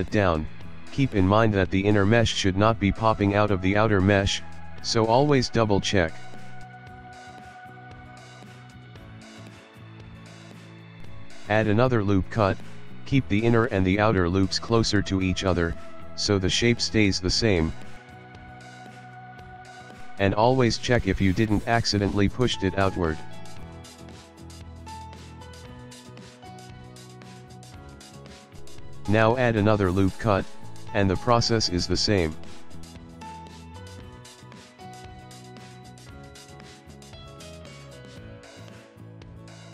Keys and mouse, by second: 0.4 s, 4.1 ctrl+click, 4.6 ctrl+middle click, 4.8 ctrl+middle click, 5.2 shift+middle click, 5.6 shift+middle click, 6.2 shift+middle click, 6.4 shift+middle click, 6.7 s, 8.4 ctrl+middle click, 8.6 ctrl+middle click, 8.8 shift+middle click, 9.1 shift+middle click, 11.4 ctrl+r, 14.9 s, 18.9 shift+middle click, 19.3 shift+middle click, 19.5 ctrl+middle click, 19.9 ctrl+middle click, 20.1 shift+middle click, 20.3 shift+middle click, 21.1 shift+middle click, 22.1 s, 23.3 ctrl+middle click, 24.3 g, 25.1 s, 27.5 ctrl+middle click, 27.9 shift+middle click, 28.4 ctrl+middle click, 30.3 ctrl+r, 32.4 s, 34.5 ctrl+middle click, 34.8 shift+middle click, 35.3 ctrl+middle click, 35.5 ctrl+middle click, 36.1 s, 37.0 ctrl+middle click, 37.4 shift+middle click, 38.9 ctrl+middle click, 39.1 ctrl+middle click, 39.6 middle click.